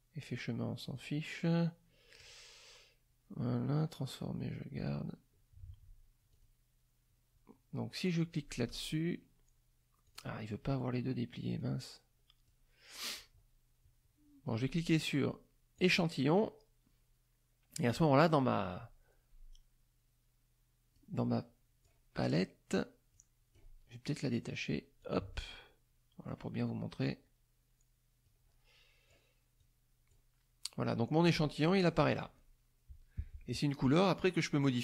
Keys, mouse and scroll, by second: 0.9 click, 2.2 click, 4.7 click, 6.3 click, 8.7 click, 10.0 click, 11.6 click, 15.8 click, 17.9 click, 20.9 click, 23.1 click, 25.0-26.5 drag, 28.2 click, 29.6 click, 31.8 click, 34.7-34.8 drag.